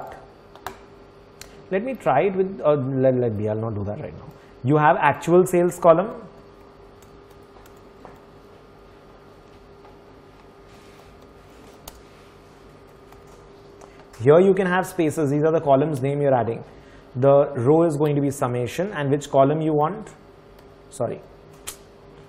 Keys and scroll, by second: 5.7-13.8 typing.